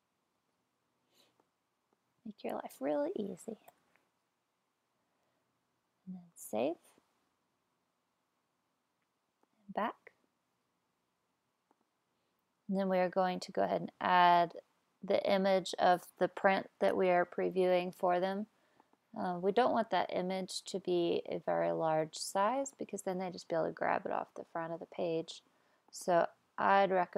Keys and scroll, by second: 0.3 super+v, 3.7 BackSpace.